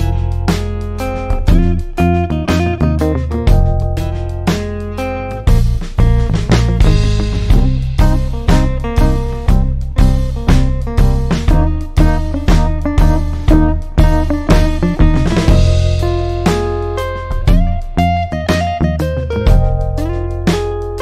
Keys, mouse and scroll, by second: 7.5 click, 10.8 click, 11.3 click, 13.7 click, 18.6 click.